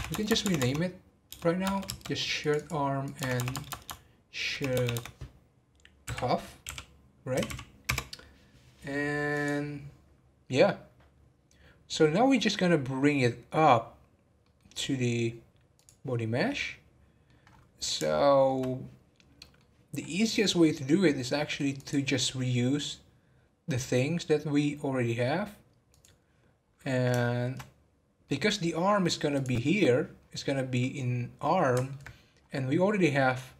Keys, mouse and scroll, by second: 0.1 BackSpace, 0.3 BackSpace, 2.4 click, 3.3 BackSpace, 3.5 BackSpace, 7.4 f, 9.3 click, 11.4 scroll down 2, 14.4 middle click, 15.0 scroll down 1, 15.7 click, 16.1 scroll down 1, 16.4-17.4 middle drag, 17.4-18.1 scroll up 2, 18.1-19.9 shift+middle drag, 19.9-21.7 scroll up 1, 21.7 click, 25.9 click, 26.6 scroll up 2, 27.2-29.3 shift+middle drag, 29.3 click, 30.2-30.5 scroll down 6, 30.8-32.3 middle drag, 32.3 scroll up 5.